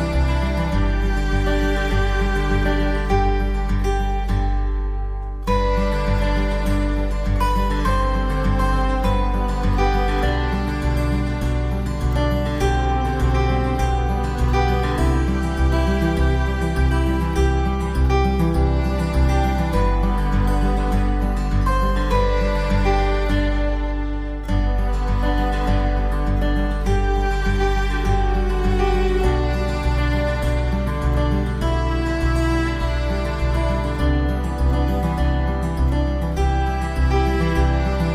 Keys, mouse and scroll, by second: 0.5 alt+middle click, 0.9 alt+middle click, 1.2-1.5 scroll up 1, 1.5 click, 2.1 middle click, 2.1 middle click, 2.2 alt+middle click, 2.3 alt+middle click, 2.7 shift+click, 3.0 shift+click, 3.1 ctrl+z, 3.7 shift+click, 4.1 shift+click, 4.2 alt+middle click, 4.4 click, 4.8 scroll down 1, 4.9 middle click, 4.9 middle click, 5.0 scroll up 1, 5.2 middle click, 5.5 alt+click, 5.9 middle click, 6.5-7.1 scroll down 2, 7.0 shift+click, 7.1 shift+click, 7.2 scroll up 1, 7.4 middle click, 7.5 middle click, 7.9-8.3 scroll down 1, 8.3 middle click, 8.5 middle click, 8.8 scroll down 1, 8.9 s, 9.2 click, 9.6 click, 9.9-10.6 scroll up 2, 10.1 alt+middle click, 10.2 alt+middle click, 10.6 click, 11.4 alt+middle click, 11.6 click, 12.5 F5, 12.7 F3, 12.9 click, 13.3 click, 13.6 middle click, 13.6 F3, 13.9 alt+middle click, 14.2 alt+middle click, 14.4 alt+middle click, 14.5 alt+middle click, 14.8 click, 15.3 ctrl+click, 15.8 middle click, 16.0 scroll down 1, 16.2 alt+middle click, 16.3 alt+middle click, 16.5 click, 17.1 click, 17.3 alt+middle click, 17.6 alt+middle click, 17.9 click, 18.7 alt+middle click, 19.4 click, 19.9 alt+middle click, 20.7 click, 21.0 middle click, 21.0 middle click, 21.4 s, 21.6 shift+click, 21.9 shift+click, 22.2 shift+click.